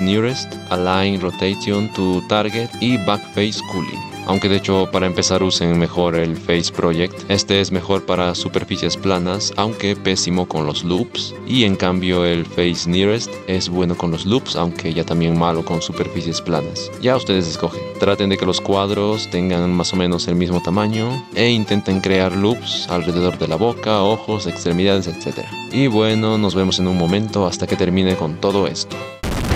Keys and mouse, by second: 4.2 2, 4.3 e, 5.5 click, 7.2-9.8 typing, 8.7 click, 10.7-13.1 drag, 11.4 ctrl+z, 13.3 e, 14.7 ctrl+z, 14.8-16.2 typing, 15.8 click, 16.3 click, 16.6-17.9 middle drag, 17.9-25.6 typing, 23.0 shift+click, 24.3 click, 24.6 click, 25.0 click, 25.4 click, 25.6 click, 25.8 click, 26.8 shift+click, 28.1 middle click, 28.6 shift+middle click, 29.2-29.5 typing.